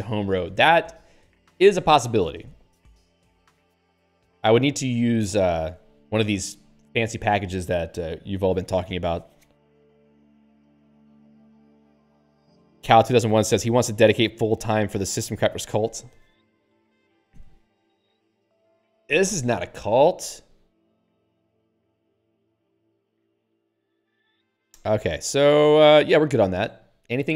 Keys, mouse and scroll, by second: 0.8 scroll up 2, 20.4 click, 20.5 click, 20.9 click, 21.0 click, 23.6 ctrl+n.